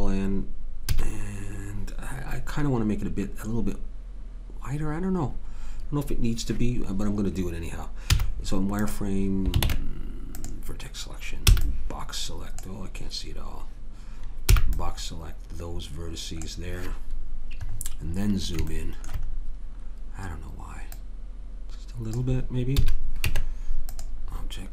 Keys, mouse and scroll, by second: 0.9 a, 8.1 z, 9.6 ctrl+Tab, 11.5 b, 14.6 b, 20.9-22.1 drag, 22.1 right click, 22.8 a, 23.3 Tab.